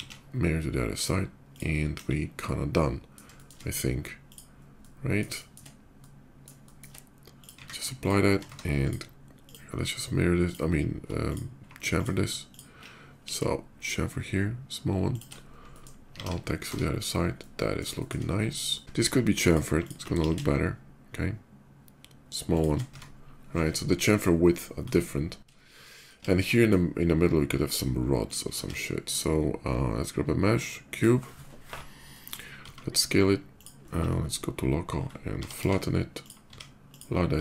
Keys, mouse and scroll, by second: 0.7 alt+x, 0.7 click, 1.3 click, 1.6 KP_5, 2.2-2.9 middle drag, 3.1 shift+middle drag, 3.6-4.0 shift+scroll up 1, 4.0 shift+click, 4.5-4.9 shift+middle drag, 5.1 shift+middle click, 5.7-6.2 shift+middle drag, 6.4 shift+middle drag, 7.0 shift+click, 7.3 q, 7.8 click, 8.2 Tab, 8.6 click, 9.2 click, 10.2 ctrl+click, 11.0 ctrl+click, 11.7 ctrl+click, 12.3 ctrl+click, 12.6 ctrl+middle click, 12.9 ctrl+b, 14.9 click, 15.4 shift+middle click, 15.9 alt+x, 16.8 Tab, 17.2 middle click, 17.7 middle click, 18.3 shift+middle click, 19.1 click, 19.6 click, 20.3 shift+b, 21.0 ctrl+shift+b, 22.3 shift+click, 22.5 Tab, 24.5 middle click, 25.6 middle click, 26.0-27.7 shift+middle drag, 27.8 shift+click, 28.3 shift+a, 30.5 click, 31.7 middle click, 33.2 click, 33.2 s, 33.6-34.2 scroll down 1, 34.2 /, 34.7 scroll down 1, 34.9 middle click, 34.9 s, 36.0 click, 36.0 z, 36.2 s, 36.6 click, 37.0 s.